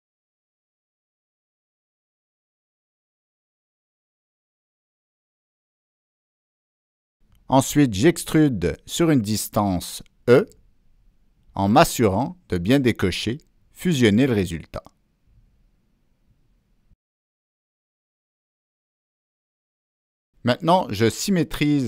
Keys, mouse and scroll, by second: 0.8 Down, 1.2 Down, 1.2 Return, 1.2 click, 3.2 click, 4.4 Return, 4.4 click, 5.2 click, 7.3 click, 8.7 click, 9.5 click, 11.5 Down, 11.7 Return, 11.7 Down, 11.7 click, 13.5 middle click, 13.9 Return, 13.9 Down, 15.8 click, 17.6 click, 19.9 middle click, 21.3 click.